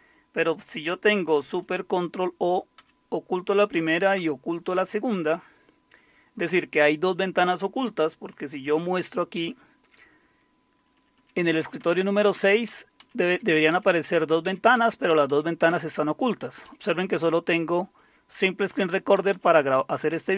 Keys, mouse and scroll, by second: 2.8 ctrl+super+o, 4.2 ctrl+super+o, 9.3 alt+super+Tab, 10.9 Down, 11.1 Down, 11.6 Up, 11.8 Up, 12.3 Down, 12.6 Up, 13.0 Down, 13.3 Up, 13.7 Down, 14.0 Up, 14.4 Down, 14.7 Up, 15.1 Down, 15.7 Up, 16.6 Down, 18.6 Up, 19.1 Down.